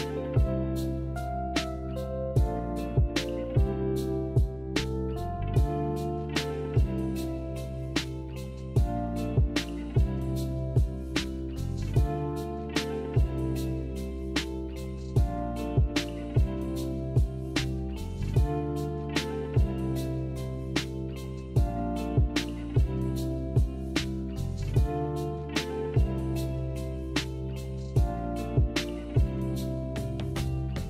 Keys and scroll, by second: 4.9 z, 10.1 b, 19.4 m, 27.4 b, 28.7 z, 30.1 Delete.